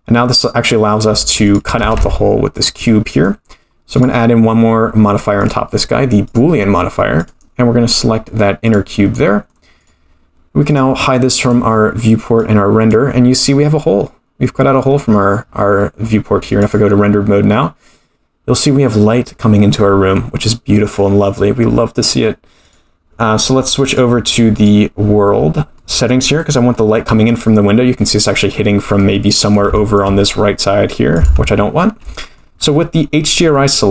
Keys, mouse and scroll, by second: 1.5 click, 1.8 g, 2.9-3.3 middle drag, 3.3-3.9 scroll down 1, 3.9 click, 3.9 scroll down 2, 5.1 click, 5.4-6.9 drag, 7.2 click, 9.1-9.5 middle drag, 9.8 click, 10.7 click, 11.4 click, 11.7-12.5 scroll down 2, 12.5 click, 14.7-15.4 scroll up 3, 15.4-16.7 scroll down 3, 16.7 click, 16.7-17.8 scroll down 1, 22.6-23.8 drag, 23.9-24.7 drag, 25.4-25.8 scroll down 4, 25.8 middle click, 26.7 middle click, 29.0 middle click, 29.7 shift+middle click, 31.1 click, 32.0 middle click, 32.6-33.5 scroll up 7, 33.3 middle click.